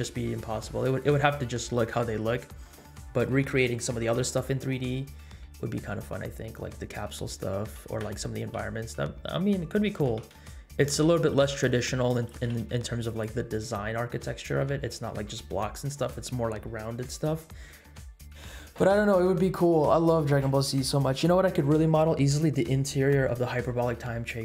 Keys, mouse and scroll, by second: 5.3-5.8 middle drag, 6.1 scroll up 1, 6.4 middle drag, 7.9 KP_7, 9.9 g, 11.3 r, 12.3 g, 14.1-14.9 scroll down 3.